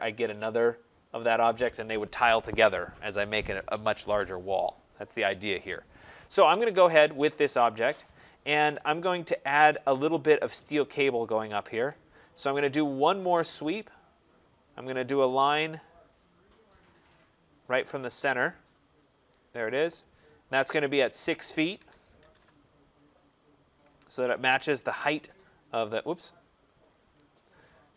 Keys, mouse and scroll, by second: 6.8 scroll, 14.5 click, 15.2-15.6 scroll, 15.6 middle click, 15.7 middle click, 16.1 middle click, 16.2 middle click, 16.7 middle click, 17.0 middle click, 19.3 click, 19.7 middle click, 19.8 scroll, 21.6-22.2 typing, 23.2-24.3 scroll, 23.3 Return, 23.3 right click, 24.7 Return, 26.0 scroll, 26.8 right click, 27.1 scroll.